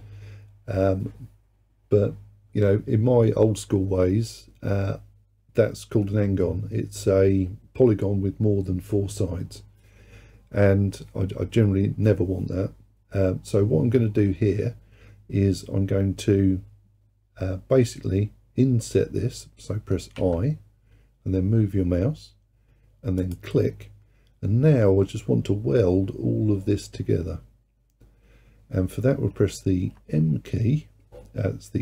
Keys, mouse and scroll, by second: 20.2 i, 30.0 m.